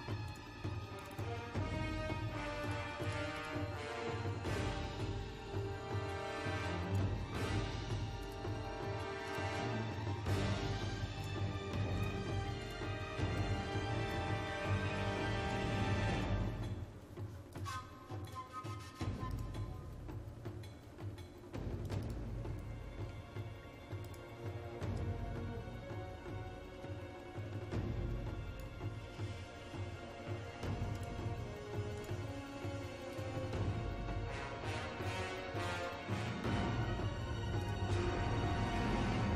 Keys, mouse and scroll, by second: 28.5-36.6 drag.